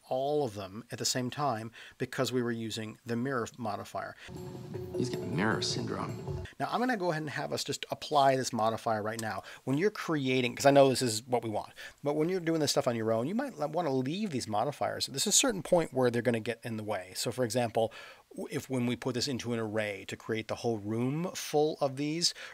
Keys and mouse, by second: 3.5 middle click, 8.6 space, 9.2 click.